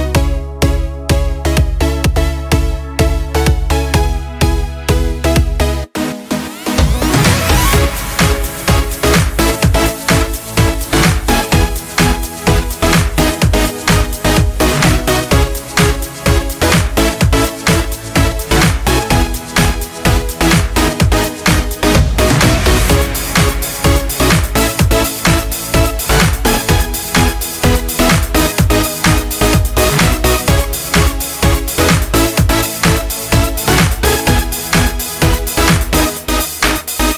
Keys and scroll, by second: 29.1 ctrl+z, 36.4 ctrl+space.